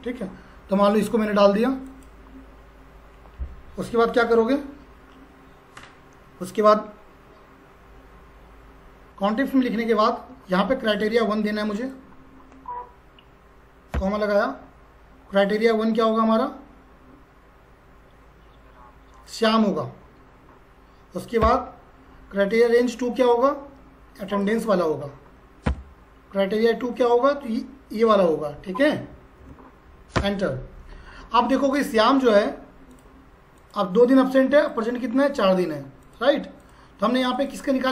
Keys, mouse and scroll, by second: 1.9 click, 9.1 Tab, 11.8 click, 19.3 click, 24.3 click.